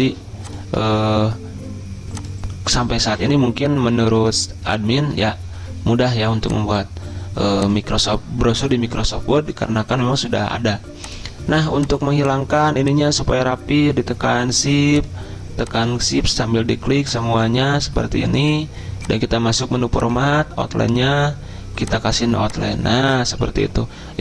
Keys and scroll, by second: 0.1 ctrl+a, 0.9 ctrl+a, 3.2 ctrl+], 3.4 ctrl+], 3.8 ctrl+], 3.8 ctrl+], 3.9 ctrl+].